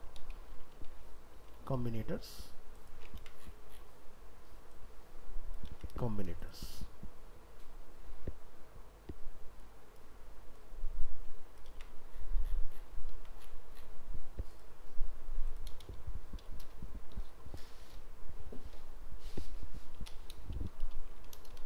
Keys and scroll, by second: 3.2 ctrl+c, 5.7 ctrl+v, 11.7 ctrl+v.